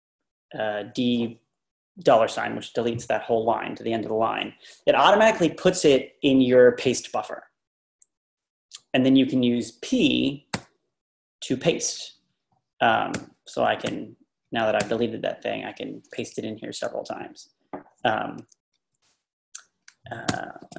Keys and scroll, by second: 10.6 p, 12.1 Page_Down, 13.1-15.3 typing, 14.5 Page_Down, 20.3 u.